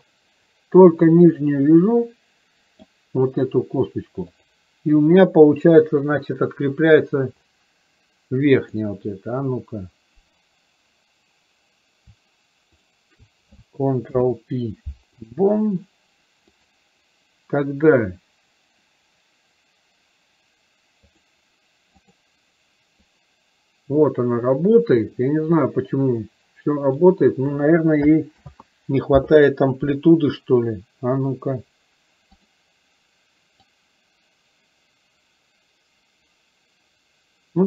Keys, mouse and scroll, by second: 4.5 click, 8.8 click, 12.8 shift+click, 23.2-27.2 drag, 32.4 click, 33.7-37.6 drag.